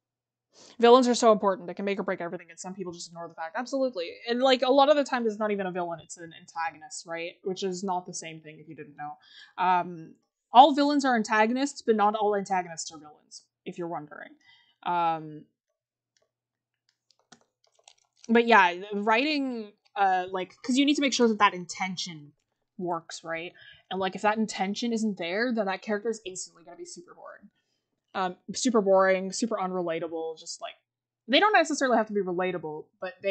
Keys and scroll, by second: 17.2 scroll, 17.7-19.7 scroll up 1.